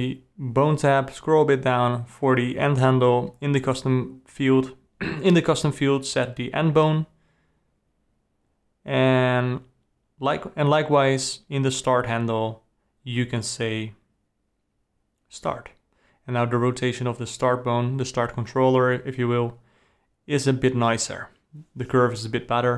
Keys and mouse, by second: 0.7 r, 3.3 click, 7.6-9.0 drag, 9.8 click, 10.1 r, 12.0 r, 13.4 alt+g, 15.1 click, 15.6 r, 17.0 click, 18.2-19.5 drag, 20.6 r, 22.7 click.